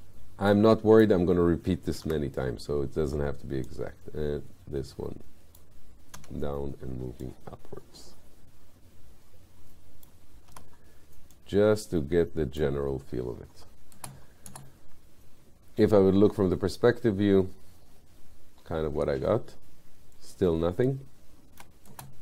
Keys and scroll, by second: 2.1 r, 6.2 w, 10.6 r, 14.0 space.